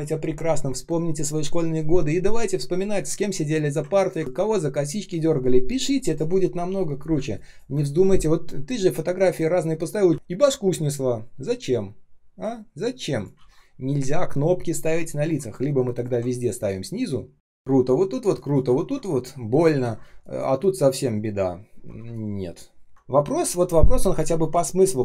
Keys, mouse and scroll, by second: 3.9 ctrl+click, 7.0 space, 7.6 space, 8.6 space, 10.1-10.8 ctrl+scroll up 1, 13.3 ctrl+z, 16.8 ctrl+scroll down 1, 18.1 space, 18.6 ctrl+scroll up 1, 19.7 ctrl+scroll down 1, 19.9 space, 21.6 ctrl+scroll down 1, 21.9 space, 22.4 space, 22.5 space, 22.9 ctrl+z.